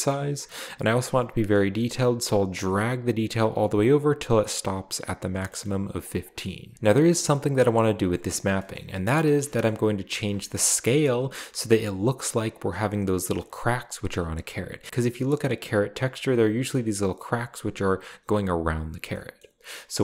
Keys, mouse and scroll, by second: 2.5-4.1 drag, 5.6 scroll up 2, 6.0 click, 6.5 scroll down 1, 7.5-8.2 middle drag, 8.0 click, 8.7 middle click, 8.7 scroll up 1, 9.5 shift+middle click, 10.1 scroll up 1, 10.4 shift+middle click, 10.7-11.1 middle drag, 10.7 scroll up 1, 16.7-17.3 scroll down 2, 19.1 scroll up 2, 19.4 middle click, 19.9 scroll up 2.